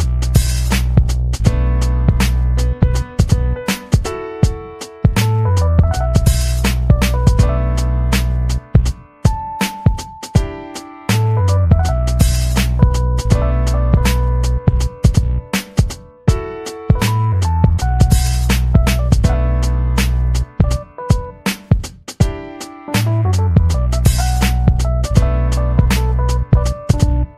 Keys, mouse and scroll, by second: 0.8 click, 1.2-1.6 scroll up 4, 3.1-3.6 scroll up 4, 5.0 click, 5.2 click, 5.5-6.9 typing, 7.2 click, 8.8 click, 10.1 click, 10.7 click, 11.8 click, 14.1 click, 14.5 click, 14.9 click, 17.0 scroll down 2, 17.7 scroll down 4, 18.4-21.1 drag, 21.3-21.7 scroll down 2, 22.2 click, 22.4-23.8 drag, 24.2 click, 24.5-26.0 drag, 26.7 click, 26.9 scroll down 1, 27.2 click.